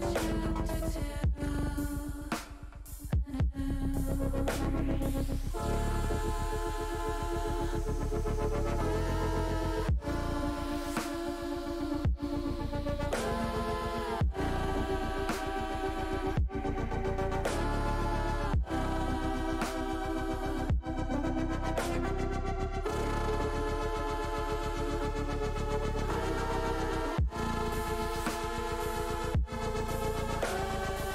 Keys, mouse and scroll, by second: 0.8 click, 1.4 click, 3.9 click, 4.6-5.8 middle drag, 6.1 middle click, 10.2 ctrl+shift+s, 14.1 ctrl+alt+s, 16.6 middle click, 20.7 shift+middle click, 24.3 alt+shift+s, 25.3 click, 26.5 alt+shift+s, 27.2 click, 28.7 shift+middle click, 30.8-31.1 drag.